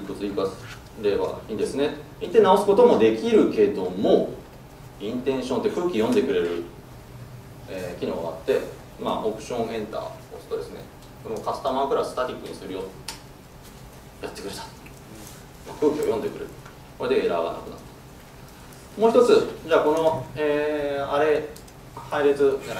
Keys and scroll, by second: 2.9 super+z, 6.1 alt+Return.